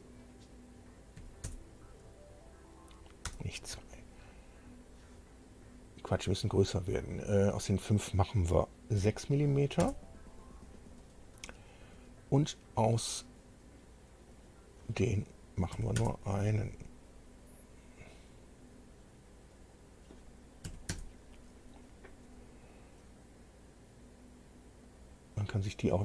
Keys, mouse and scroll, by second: 1.2 KP_2, 3.2 BackSpace, 9.0 KP_6, 9.8 KP_Enter, 14.2 click, 15.7 KP_1, 15.9 KP_Enter, 19.5 click, 20.6 KP_1, 20.9 KP_Enter, 24.8 click, 25.8-26.0 drag.